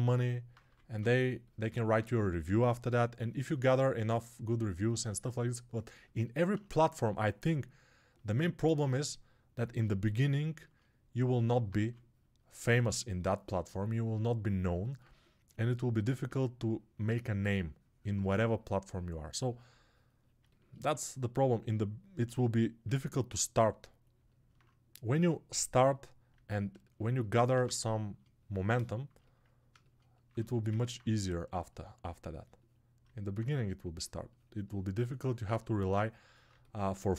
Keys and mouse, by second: 27.5 alt+q.